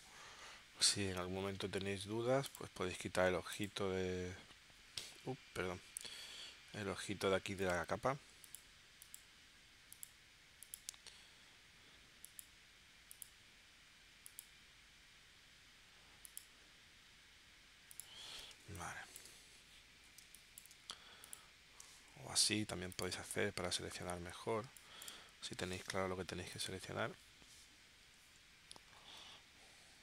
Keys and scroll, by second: 18.5 space, 20.2 space, 22.1 super+y, 23.4 super+y, 24.7 space.